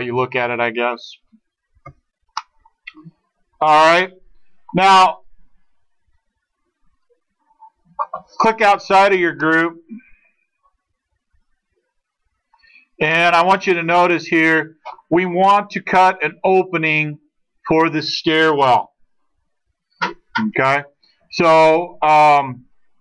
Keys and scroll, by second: 1.7 space, 9.9 space, 11.9 space, 13.6 space, 17.4 space, 22.9 space.